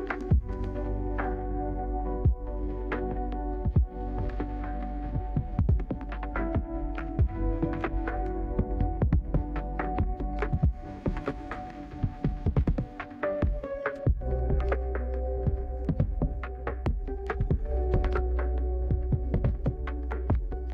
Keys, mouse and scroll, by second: 0.2 middle click, 0.2-1.3 scroll down 3, 0.9 middle click, 1.4 right click, 2.5 middle click, 3.9 click, 8.6 middle click, 8.7 scroll down 2, 8.7-9.6 scroll up 2, 9.2-10.2 right drag, 13.8-19.0 drag, 20.4 -.